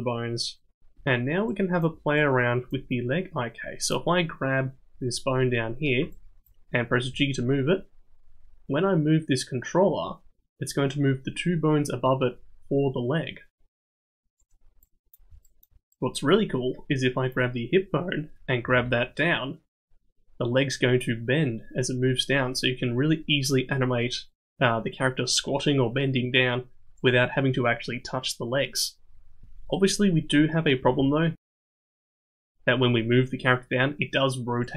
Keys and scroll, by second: 7.1 g, 18.6 g, 30.8 g.